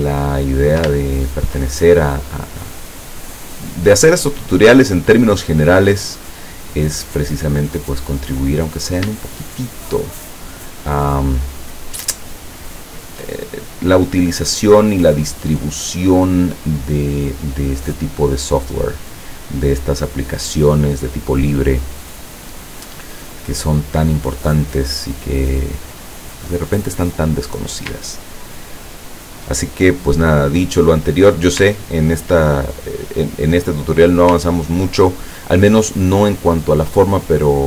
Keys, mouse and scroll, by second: 0.0 ctrl+click, 0.5 ctrl+click, 0.9 ctrl+shift+click, 3.9-5.8 drag, 7.6 click, 8.7 click, 9.5 shift+click, 10.3 shift+click, 12.7 shift+click, 13.9-18.8 drag, 28.2-28.6 ctrl+scroll down 2, 28.8 ctrl+scroll down 2, 30.2-31.3 drag, 31.8 ctrl+scroll down 2, 33.1 click, 34.6 ctrl+scroll down 2, 35.8 click.